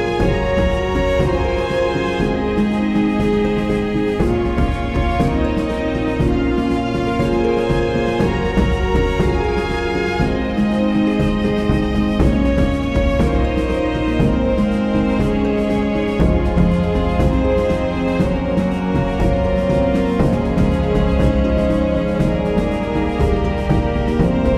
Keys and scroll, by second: 11.1 Return, 13.4 super+z, 16.0 super+z.